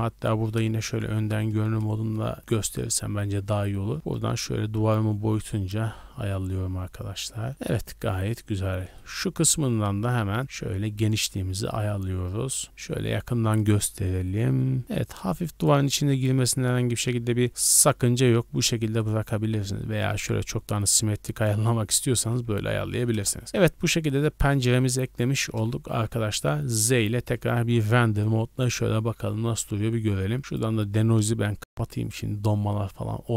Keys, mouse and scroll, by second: 0.8 KP_1, 1.5 z, 1.9 shift+middle drag, 2.2-2.8 scroll up 7, 2.5 shift+middle drag, 3.9-7.5 shift+drag, 7.5 scroll down 4, 7.9-8.4 shift+middle drag, 8.4-9.0 scroll up 2, 8.8-10.4 shift+middle drag, 10.4-12.6 shift+drag, 12.6 shift+middle click, 12.6 scroll up 6, 13.6-15.9 shift+drag, 16.2 scroll down 2, 17.4-18.1 scroll up 6, 17.5 shift+middle drag, 19.0-22.0 shift+drag, 19.0 scroll up 1, 22.2-22.7 scroll down 3, 22.5 z, 23.1 KP_0, 23.5 a, 23.6 shift+middle drag, 23.8 scroll up 2, 24.5-24.9 shift+middle drag, 24.9 scroll down 1, 25.4 shift+middle click, 25.4 scroll down 1, 25.9 n, 26.2 scroll down 1, 26.7 z, 30.4-33.3 drag.